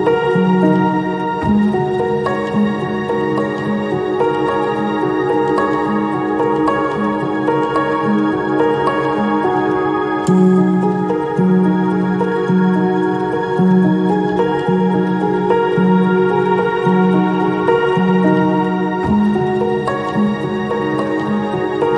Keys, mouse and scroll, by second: 2.3 ctrl+click, 6.5 ctrl+i.